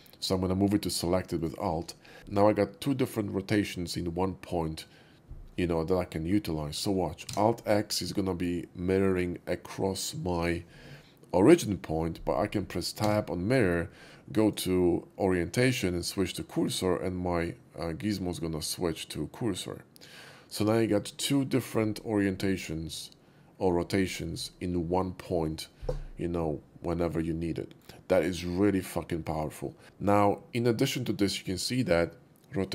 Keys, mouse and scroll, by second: 1.4 alt+click, 2.0 alt+middle drag, 5.4 middle click, 6.6 shift+middle click, 7.3 alt+x, 8.1-9.2 middle drag, 13.1 Tab, 14.4 Tab, 14.4 click, 16.6 click, 17.4-20.5 middle drag, 27.2-27.7 middle drag, 29.2 right click, 29.8 typing.